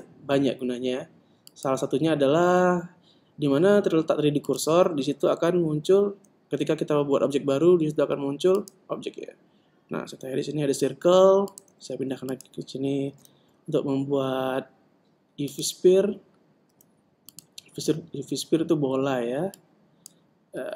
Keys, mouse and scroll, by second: 6.1 shift+a, 11.0 s, 11.9 click, 13.5 shift+a, 17.0 s, 19.9 click.